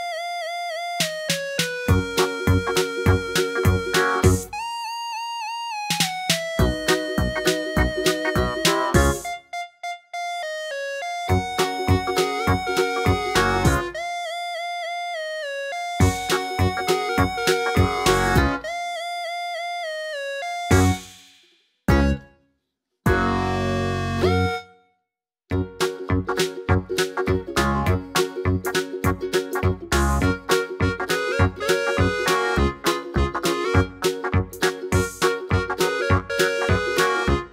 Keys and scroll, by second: 2.0 Up, 2.1 Up, 2.2 Up, 20.0 super+a, 25.4 3, 25.5 Return, 33.6 Page_Up, 33.7 Page_Up, 37.2 d.